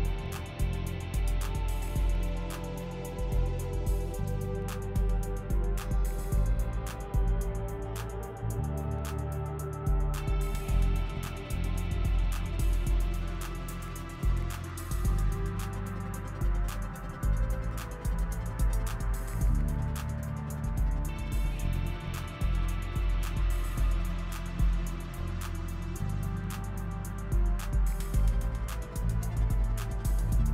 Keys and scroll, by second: 0.0-7.0 typing, 9.2 f, 10.3 shift+s, 11.0 shift+s, 11.2 shift+s, 11.6 shift+s, 16.3 p.